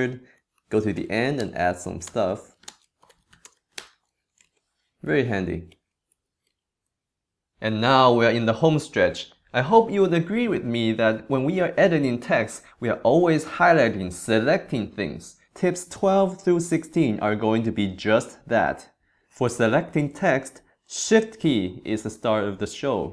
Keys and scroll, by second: 0.9 super+Right, 1.4 super+BackSpace, 2.0-4.4 typing, 5.0 super+Left, 5.7 super+Right, 6.1 super+Left, 6.4 super+Right.